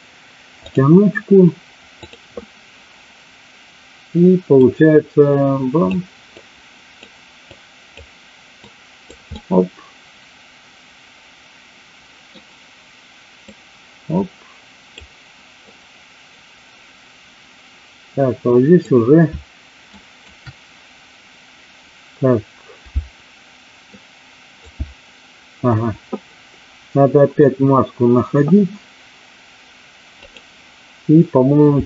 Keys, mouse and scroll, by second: 0.6 click, 2.0 click, 4.5-5.8 drag, 6.4 click, 7.5 click, 8.6 click, 9.3-12.3 middle drag, 13.5-14.9 drag, 15.6-18.9 drag, 19.9 ctrl+click, 23.9 alt+click, 30.2 click.